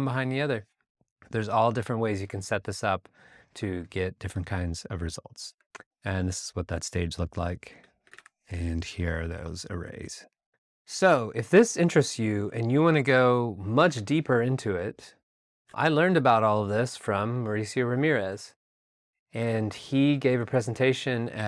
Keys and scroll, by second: 5.5 Right, 8.0 alt+BackSpace, 8.2 r, 10.4 alt+Tab, 13.9 super+Tab.